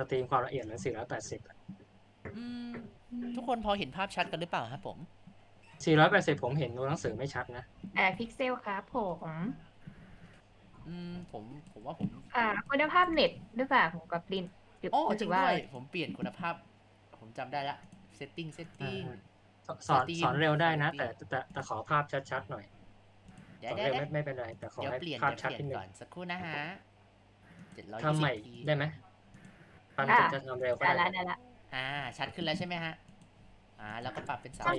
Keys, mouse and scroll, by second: 11.0 space, 11.3-13.3 ctrl+alt+drag.